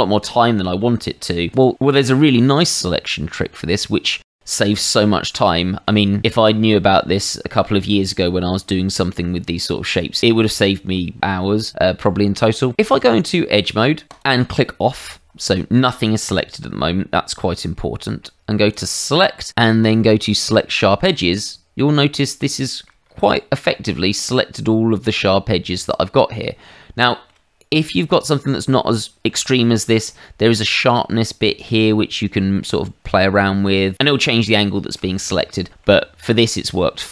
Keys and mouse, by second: 0.5 shift+middle click, 1.5 click, 3.8 shift+middle click, 4.9 middle click, 12.7 shift+middle click, 13.0 Tab, 14.1 click, 18.7 click, 21.0 click, 22.5 shift+middle click, 23.5 middle click, 27.0 shift+middle click, 29.0 shift+middle click, 29.8 middle click, 30.8 click, 34.5 shift+middle click, 35.7 middle click.